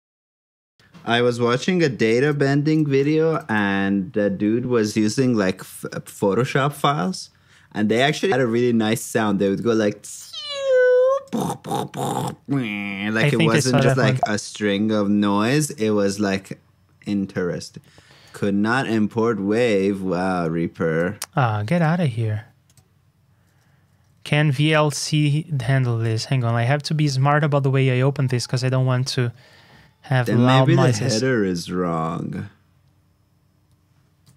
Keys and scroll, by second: 4.3 super+Tab, 16.9 super+Tab, 24.0 super+Tab.